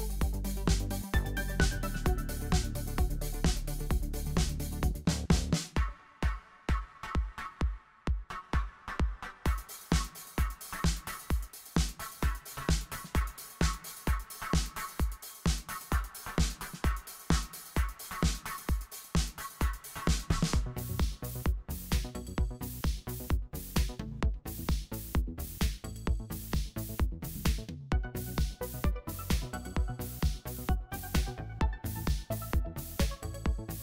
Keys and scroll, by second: 0.2 shift+Up, 0.3 shift+Up, 0.5 shift+Up, 1.0 x, 2.5 v, 3.4 super+y, 6.8 super+y, 8.7 super+y, 10.3 super+y, 10.5 super+0, 13.4 alt+super+b, 15.0 super+z, 18.1 w, 18.2 Return, 19.1 shift+Page_Up, 19.2 shift+Page_Up, 19.3 shift+Page_Down, 19.7 shift+Up, 19.8 shift+Down, 21.4 shift+Up, 22.4 w, 22.4 Return, 23.2 v, 24.5 super+y, 26.5 super+y, 27.7 super+y, 29.6 super+y, 29.8 super+0, 31.2 super+s, 32.6 alt+super+b.